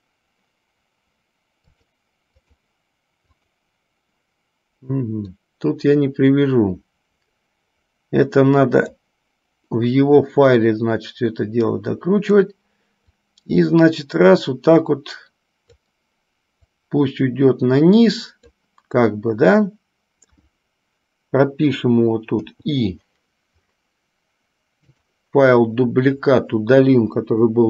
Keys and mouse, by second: 1.9-3.5 drag, 5.6-9.4 drag, 10.8-12.9 drag, 13.5-16.3 drag, 16.9-18.9 drag, 22.5 i, 25.0 click, 27.4 Delete.